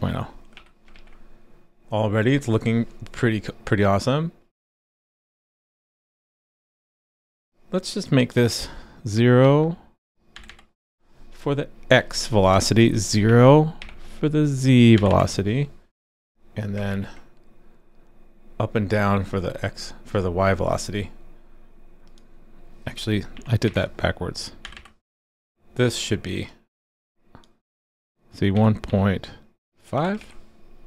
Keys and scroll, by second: 0.9 super+s, 16.9 super+s, 30.2 super+s.